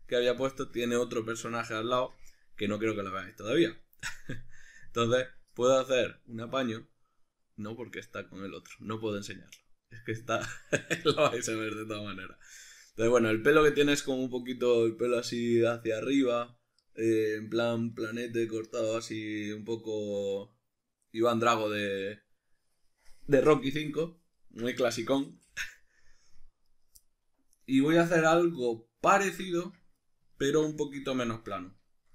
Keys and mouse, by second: 26.7 right click, 27.0 middle click, 29.6 Tab, 30.0 middle click, 31.3-32.1 ctrl+middle drag.